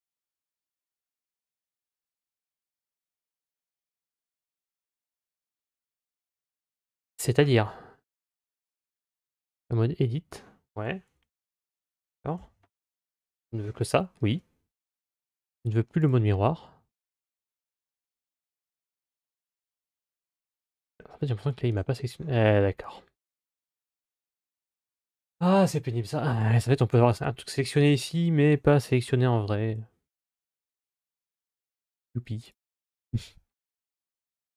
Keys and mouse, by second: 0.4-1.6 drag, 4.0 click, 5.2 click, 9.4 Tab, 12.2 KP_Divide, 15.8 click, 17.4 click, 17.9 click, 18.6 click, 23.4 click, 30.1 click, 31.7 click, 32.2 click.